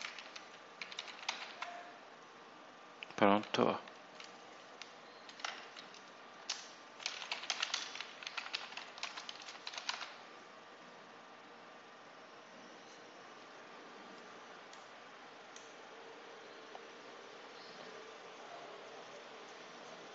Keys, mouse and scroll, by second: 0.0-1.9 typing, 6.3 Return, 6.7-10.3 typing, 14.6 click, 16.2-16.9 scroll down 4, 17.0-17.6 scroll up 3.